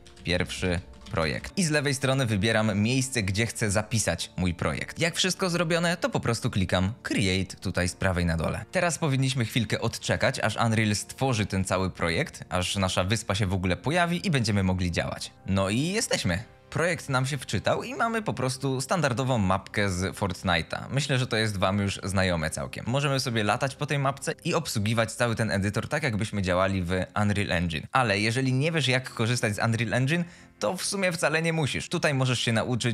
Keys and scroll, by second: 0.0-2.0 typing, 16.2-17.1 typing, 23.2 d, 24.3 w, 25.0 s, 25.6 e.